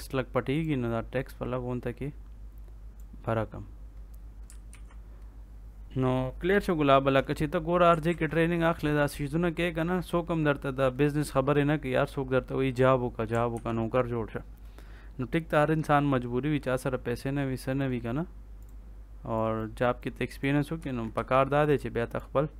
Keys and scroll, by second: 4.6 ctrl+s, 8.0 ctrl+s, 13.5 ctrl+s, 20.7 Escape.